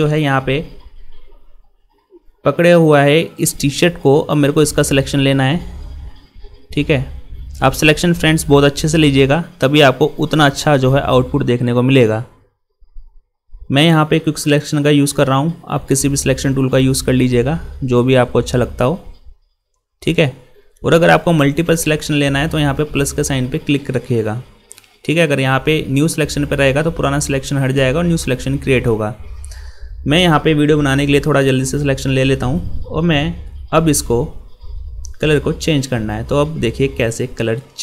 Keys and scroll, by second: 14.4 ctrl++, 31.5 ctrl+0, 33.5 ctrl++.